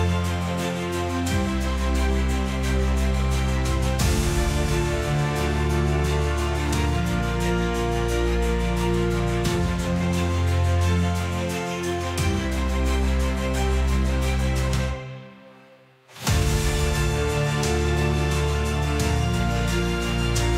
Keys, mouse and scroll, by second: 8.6 click, 10.1 click, 18.7 click, 19.2 BackSpace, 19.9 click, 20.5 click.